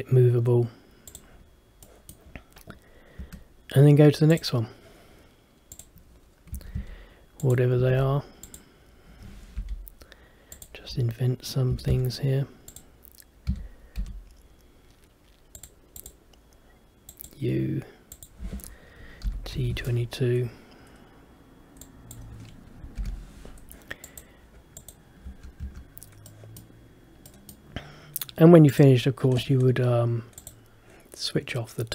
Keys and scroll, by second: 3.3 Escape, 23.1 shift+t, 25.4 Escape, 25.8 Escape.